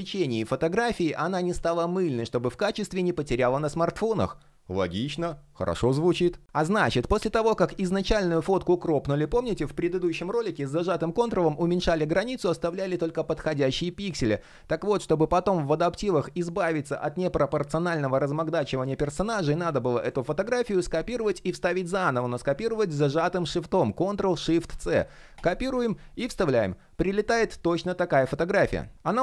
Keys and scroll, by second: 18.9 super+z, 24.3 shift+super+c, 25.7 super+v.